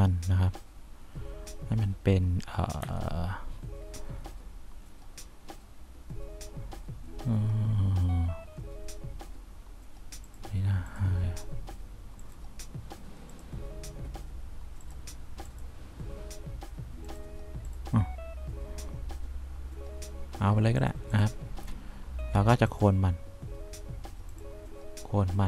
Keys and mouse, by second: 3.2 F4.